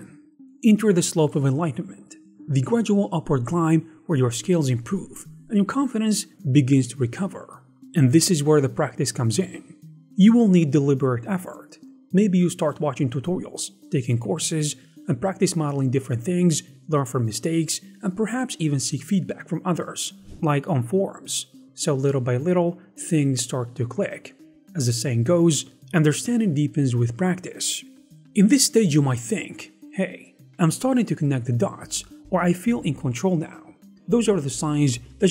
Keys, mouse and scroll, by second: 13.1 g, 14.0 middle click, 14.4 right click, 14.5 s, 15.2 KP_1.